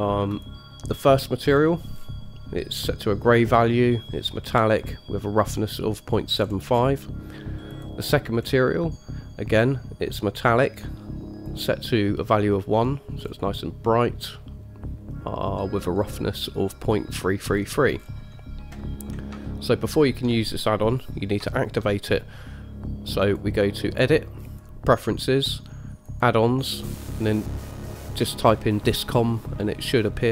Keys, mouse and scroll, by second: 0.5 click, 1.7-3.0 scroll down 4, 6.5-7.9 scroll up 4, 7.9 click, 8.6-8.9 scroll down 2, 11.7 click, 13.4-15.7 scroll down 1, 15.7-17.4 scroll down 2, 17.4-18.2 scroll down 1, 18.2-19.5 scroll down 2, 19.5 shift+scroll down 1, 19.6-20.4 shift+middle drag, 20.8 middle drag, 21.8 shift+middle drag, 23.4 click.